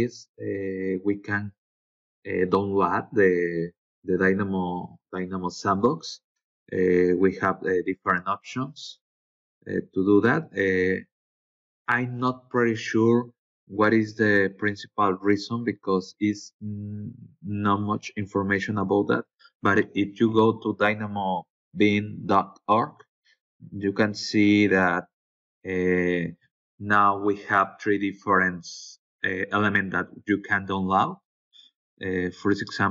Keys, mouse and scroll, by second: 4.0-4.6 scroll down 4, 12.2-13.1 scroll down 4, 13.2-13.5 scroll up 2, 14.3 scroll up 2, 18.1 click, 19.2 BackSpace, 19.6 Return, 21.0 click, 24.1 click, 28.6 click, 28.7-29.6 scroll up 2, 29.6-29.9 scroll up 1, 29.9 scroll down 2, 30.6-31.5 scroll up 2, 31.5-32.9 scroll up 1.